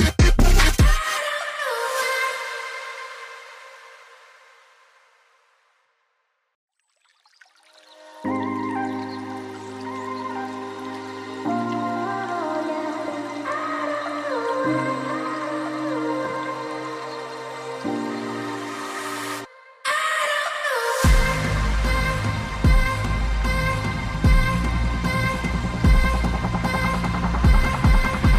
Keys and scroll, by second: 3.5 g.